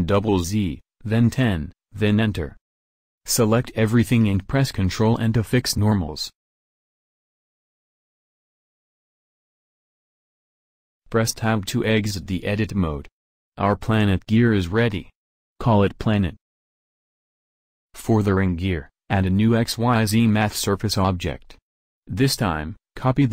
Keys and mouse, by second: 3.7 a, 4.0 a, 4.9 ctrl+n, 6.5 KP_1, 6.9 KP_7, 13.0 Tab, 14.0-15.8 drag, 15.8 BackSpace, 21.2 shift+a.